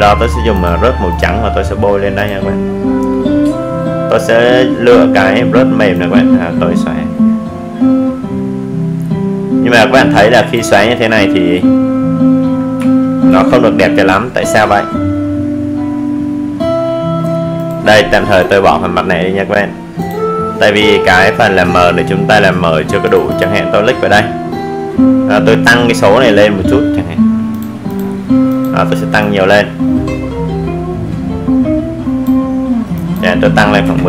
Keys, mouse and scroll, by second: 0.9 alt+Delete, 4.9 right click, 5.7 click, 10.3 click, 14.7 click, 25.0 click.